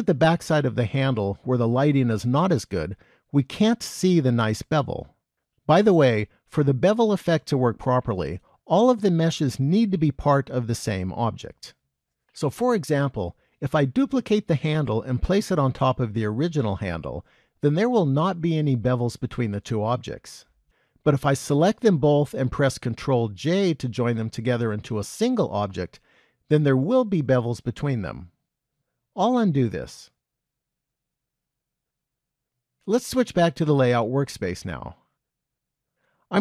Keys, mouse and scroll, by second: 34.5 click.